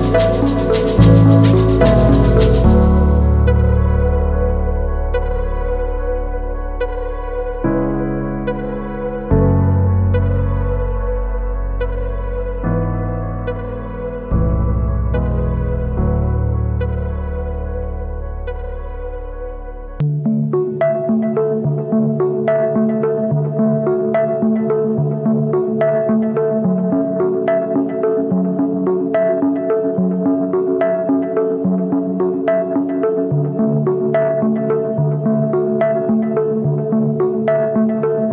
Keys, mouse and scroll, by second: 17.8 alt+click.